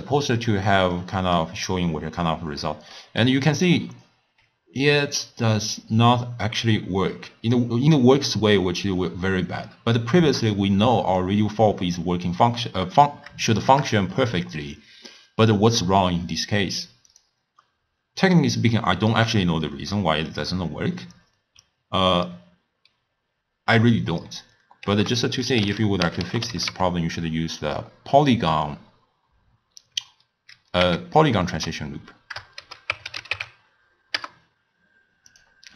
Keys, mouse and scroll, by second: 0.5-34.6 middle drag.